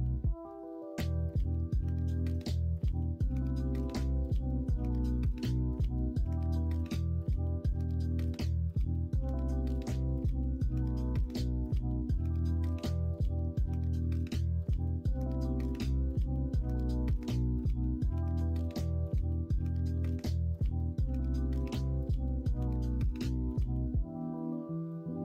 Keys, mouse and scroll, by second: 3.2 ctrl+z, 3.6 ctrl+r, 6.2 3, 9.2-10.4 drag, 12.2 alt+h, 13.3-14.8 middle drag, 15.0 middle click, 16.5 2, 21.5 e, 22.9 e.